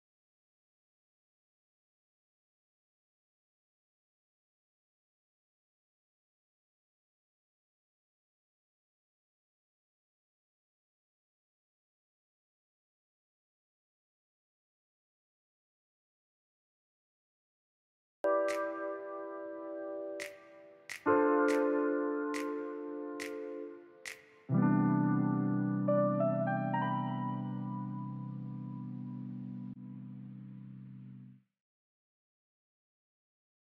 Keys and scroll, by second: 1.5 space, 2.0 s, 3.0 ctrl+a, 8.3 space, 14.1 s, 22.2-24.6 typing, 26.0 4, 26.5 ,, 27.1 shift+0, 27.6 Return, 28.2 space, 32.8 BackSpace.